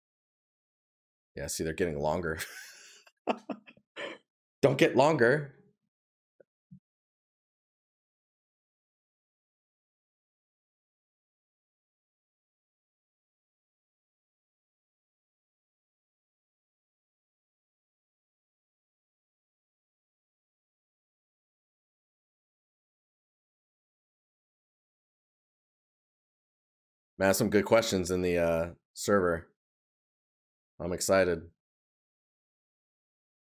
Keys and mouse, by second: 1.3 right click, 19.8 right click, 23.7 right click, 25.0 right click, 29.6 right click.